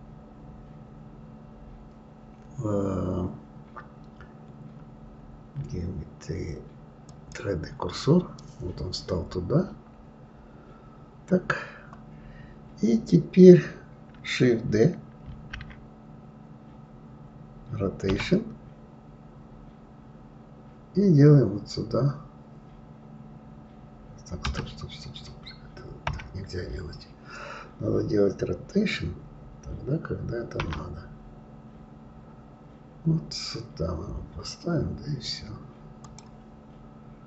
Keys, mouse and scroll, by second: 15.4 shift+d, 26.0 KP_1.